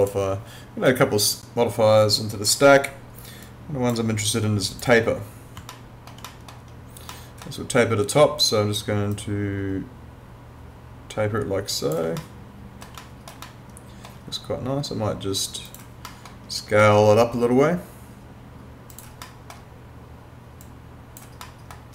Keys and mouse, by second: 0.0 click, 4.2 click, 5.7 alt+middle click, 9.1 click, 12.2 alt+middle click, 13.5 alt+middle click, 15.7 click, 16.1 middle click, 18.9 click, 19.3 middle click, 20.6 click, 21.4 middle click.